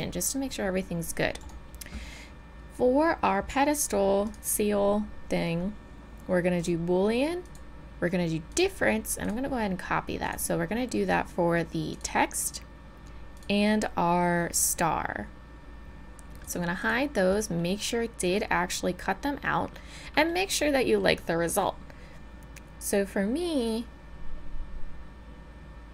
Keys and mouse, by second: 1.5 click, 4.2-6.7 drag, 7.4-12.5 drag, 13.4-17.6 drag, 17.6-19.7 middle drag, 20.1-23.1 middle drag.